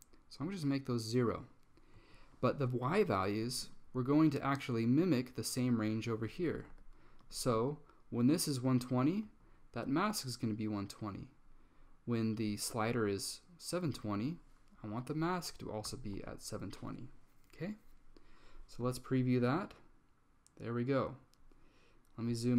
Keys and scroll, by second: 2.1 Tab, 6.4-7.8 typing, 9.4 Tab, 14.9-18.0 typing.